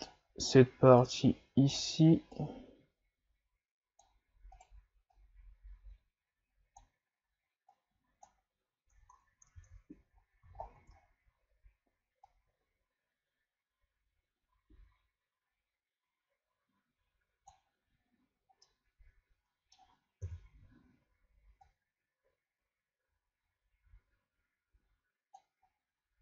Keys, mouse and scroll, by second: 4.5 right click, 5.1-8.2 drag, 9.5 shift+c, 10.1-11.0 scroll up 7, 11.0-12.3 scroll down 3, 12.3-15.3 drag, 17.9-18.6 scroll down 1, 18.6-20.2 middle drag, 20.2 KP_3, 21.7-24.7 drag, 25.7-26.2 scroll down 2.